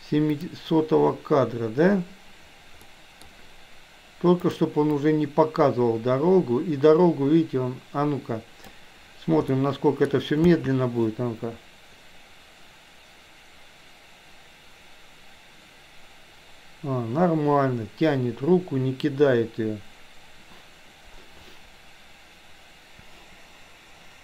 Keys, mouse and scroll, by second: 0.5 click, 2.9-3.3 middle drag, 4.7 click, 5.2-8.9 drag, 9.5 middle click, 10.5 space.